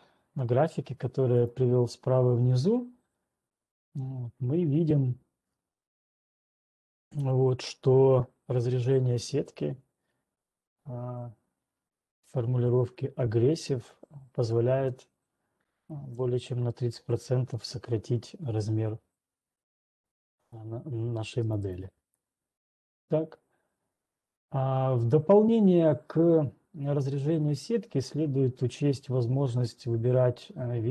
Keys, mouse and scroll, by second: 0.0 click, 1.6 click, 2.0 click, 16.5 click, 22.2 right click, 25.8-26.6 scroll down 1, 30.0-30.5 scroll down 3.